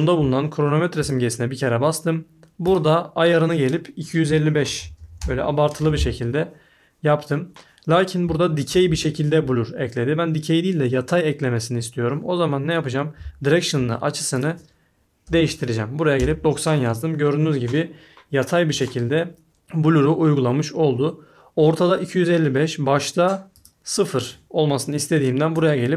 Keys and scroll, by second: 4.2-5.4 typing, 15.0-15.8 typing, 16.1 Return.